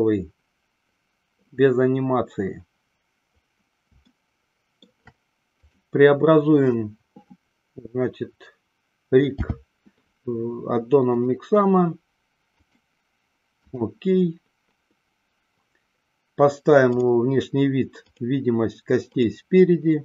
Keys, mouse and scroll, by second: 4.3-5.1 shift+middle drag, 5.8 click, 9.4 n, 12.8-15.2 drag, 17.0 click, 18.2 click.